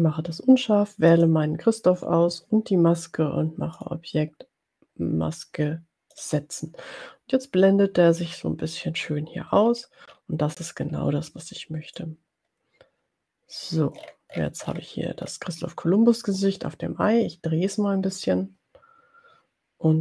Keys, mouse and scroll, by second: 1.2 shift+click, 4.1 click, 6.3 click, 9.6-11.5 ctrl+scroll down 6, 12.3-13.9 drag, 14.0-15.0 ctrl+scroll up 2, 15.0-15.6 ctrl+scroll up 1, 16.5 click, 17.8-20.0 drag.